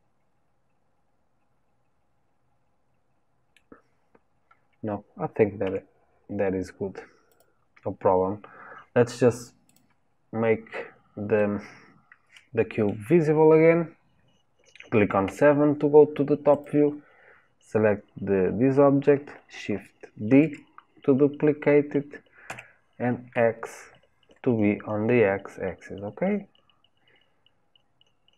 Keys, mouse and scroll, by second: 3.9 scroll down 4, 4.4-4.8 scroll up 1, 5.6 Tab, 7.3 click, 9.7 click, 10.2-11.4 scroll down 4, 11.4-14.4 middle drag, 15.2 KP_7, 16.5 click, 20.3 shift+d.